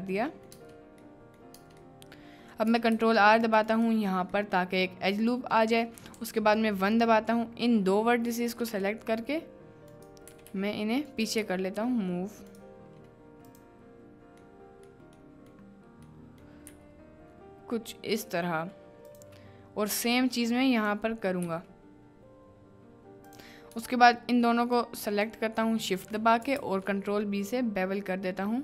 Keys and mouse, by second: 0.0 right click, 0.4 right click, 0.6 Tab, 1.1 middle click, 1.5 Tab, 1.9 click, 2.9 ctrl+r, 4.5 click, 6.2 1, 6.7 click, 8.5 g, 8.7 g, 9.9 click, 10.3 g, 10.5 g, 11.1 click, 11.4 g, 13.5 click, 14.5 click, 15.3 click, 16.2 click, 16.6 g, 19.1 click, 20.5 click, 21.4 g, 23.3 click, 24.7 shift+click, 26.5 ctrl+b.